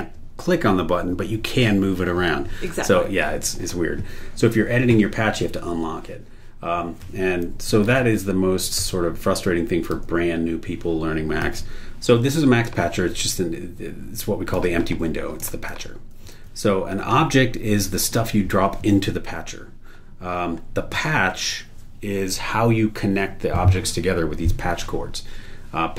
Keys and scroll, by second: 7.8 super+e, 10.1 super+e, 11.4 super+e, 16.3 super+w.